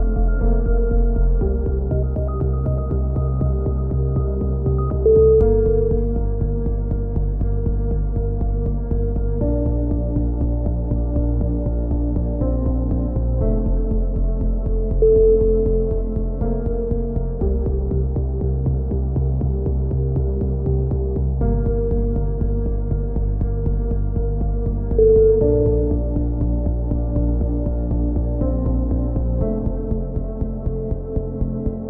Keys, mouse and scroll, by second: 1.0-2.3 right drag, 1.5 z, 2.7 alt+m, 3.4 a, 3.7 z, 5.5 alt+m, 6.1 a, 6.3 Tab, 8.4 KP_1, 9.1 z, 9.7 z, 10.4 click, 12.6 KP_1, 13.5 z, 15.5 z, 16.0 click, 17.4 click, 17.9 Tab, 18.8 ctrl+r, 19.8 KP_1, 20.9 z, 22.7 ctrl+z, 23.2-24.6 drag, 24.8 click, 26.2 a, 26.5 z, 26.7-27.7 middle drag, 27.3 z, 28.5 c, 30.4-31.5 middle drag, 31.5 ctrl+KP_7.